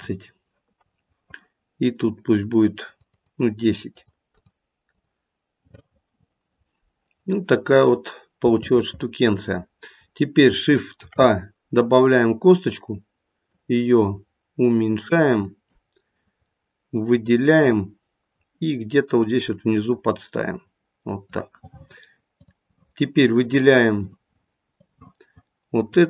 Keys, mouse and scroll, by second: 0.8 click, 2.4 click, 2.6 click, 2.8 click, 3.1 click, 3.3 click, 3.6 click, 3.8 click, 4.2 click, 4.9 click, 7.2-8.0 scroll up 1, 8.5 shift+middle click, 8.9 shift+middle click, 11.0 shift+a, 13.5 click, 17.0 click, 18.3 click, 20.0 click, 22.4 click, 24.8 click.